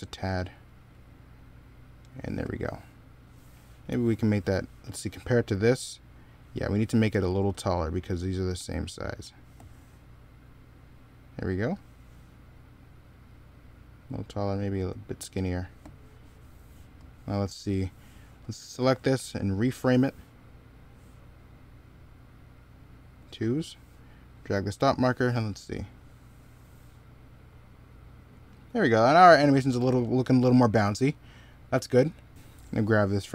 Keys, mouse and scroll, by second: 6.4 middle click, 16.0 middle click, 19.4 right click, 28.2 middle click, 30.4 middle click.